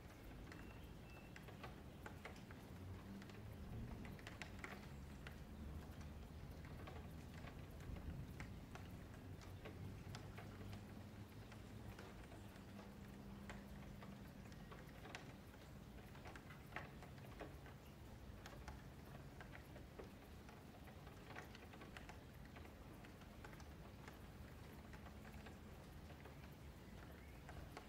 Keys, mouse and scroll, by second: 0.1 click, 1.4 F3, 2.6 click, 3.7 click, 4.9 shift+middle click, 5.6 Tab, 5.9-6.7 middle drag, 6.7 scroll down 2, 7.0-7.5 scroll up 5, 7.5 shift+middle click, 7.5 shift+scroll down 1, 7.6-9.4 scroll up 5, 9.4-10.2 scroll down 2, 10.2 shift+middle drag, 10.5 click, 11.8 click, 12.0 scroll down 3, 12.3-13.7 middle drag, 13.7 ctrl+s, 13.8 scroll down 1, 13.9-14.4 middle drag, 14.4-15.0 scroll up 3, 15.0 shift+click, 16.5 ctrl+j, 17.8 shift+click, 19.0 ctrl+KP_Subtract, 19.6 scroll down 3, 19.9-20.4 middle drag, 20.4-20.8 scroll down 1, 20.8-23.2 middle drag, 23.2-23.5 scroll up 4, 23.5 shift+scroll down 1, 23.6-23.9 scroll up 5, 23.9 Tab, 24.3 shift+middle click, 24.8 Tab, 25.9-26.5 scroll down 7, 26.5-27.7 middle drag, 27.7-27.8 scroll up 4.